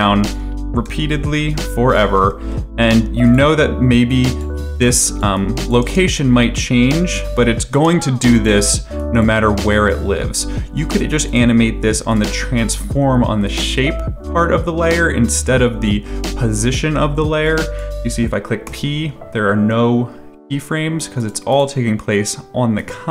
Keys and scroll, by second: 0.6 ctrl+c, 0.8 ctrl+v, 5.8 space, 7.7 space, 18.6 p.